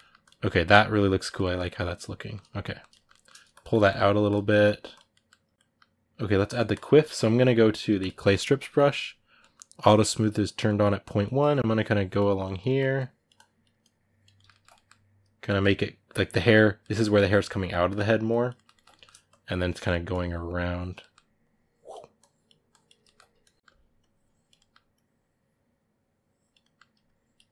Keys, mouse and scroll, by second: 0.0-1.0 drag, 1.0-3.3 ctrl+middle drag, 3.3 click, 4.3 middle click, 4.7 click, 4.9-6.5 middle drag, 6.5-8.4 drag, 8.4-10.2 middle drag, 10.2 click, 10.4 middle click, 10.8-12.4 drag, 12.4 middle click, 12.7-14.1 drag, 14.1-15.5 ctrl+middle drag, 15.5 click, 16.2-18.0 middle drag, 18.0 click, 18.3 ctrl+middle click, 19.0 click, 19.5 middle click, 19.9 click, 20.7 middle click, 21.2-22.8 drag, 22.8 ctrl+middle click, 23.2 shift+click, 23.6 middle click, 23.8 click, 24.3 ctrl+middle click, 24.7-26.4 drag, 26.4 middle click, 26.8 shift+click, 27.4-27.5 middle drag.